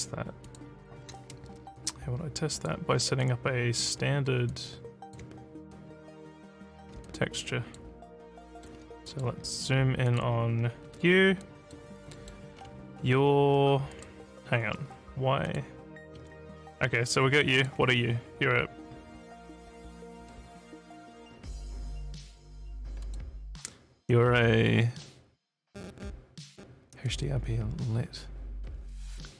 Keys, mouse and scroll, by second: 0.5 click, 1.8 click, 2.5 click, 3.2 alt+click, 4.5 alt+click, 7.1 alt+click, 8.4 alt+middle click, 9.0 click, 10.1 click, 10.9 f, 11.4 alt+click, 12.1 alt+middle click, 12.5 alt+scroll down 2, 13.9 click, 15.5 click, 16.2 f, 17.2 alt+click, 23.0 click, 27.0 click.